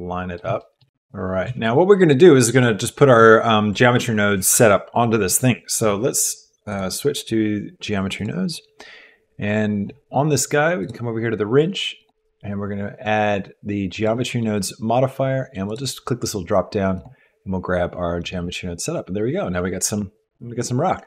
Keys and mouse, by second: 0.0 click, 0.1 middle click, 0.2 click, 0.3 middle click, 0.6 shift+middle click, 0.8 g, 1.5 g, 6.7-8.3 drag, 12.1-14.1 drag, 15.7-17.2 drag.